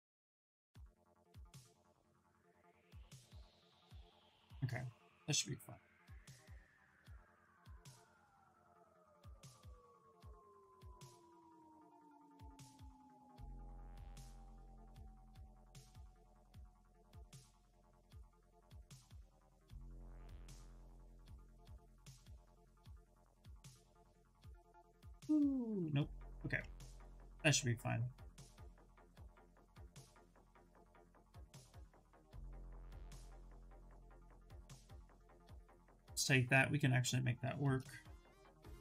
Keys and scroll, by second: 25.4 ctrl+z, 30.3 s.